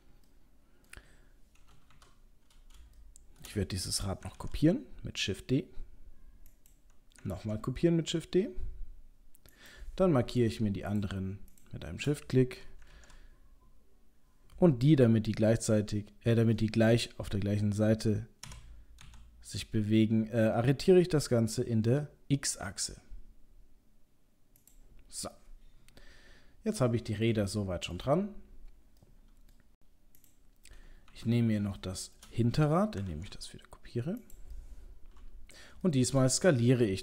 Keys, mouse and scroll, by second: 0.4 middle click, 2.0 KP_7, 2.7-3.1 scroll down 3, 3.1 shift+middle click, 3.5 shift+middle click, 4.4 shift+d, 7.4 shift+d, 10.9 shift+click, 11.6 shift+click, 13.0 shift+d, 25.4 middle click, 27.6 shift+middle click, 29.0 middle click, 30.2 click, 31.0 KP_7, 31.4 scroll up 1, 31.8 shift+middle click, 33.1 shift+d, 34.5 middle click, 35.5 middle click, 35.9 shift+middle click, 36.0 shift+middle click, 36.2-37.0 scroll up 3.